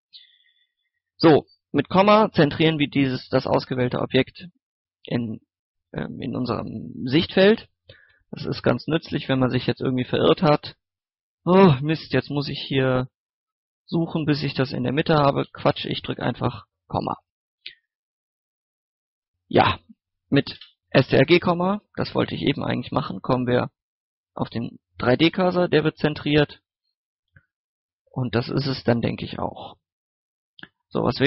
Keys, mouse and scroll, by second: 1.9 KP_Decimal, 2.4 scroll down 1, 2.7 scroll up 1, 3.2 scroll down 1, 3.4 middle click, 3.8 scroll up 1, 7.0-7.4 scroll down 1, 7.4 middle click, 7.9 scroll up 1, 8.6 middle click, 9.0 scroll down 1, 9.3 middle click, 10.4 scroll up 1, 10.7 middle click, 12.1 shift+middle click, 12.4-14.2 middle drag, 14.4 shift+middle click, 15.7 KP_Decimal, 16.3 scroll up 1, 16.6 scroll down 1, 16.9 middle click, 17.0 scroll up 1, 17.3 middle click, 17.9 scroll down 1, 18.1 middle click, 18.4 scroll up 1, 18.5 middle click, 20.5 KP_Decimal, 21.3 scroll down 1, 22.0 middle click, 22.8-24.7 scroll up 1, 24.7-26.5 middle drag, 27.0 scroll down 1, 27.2 scroll up 1, 27.4 middle click, 29.1 shift+middle click, 29.9 click, 30.6 scroll up 1, 31.0 shift+s.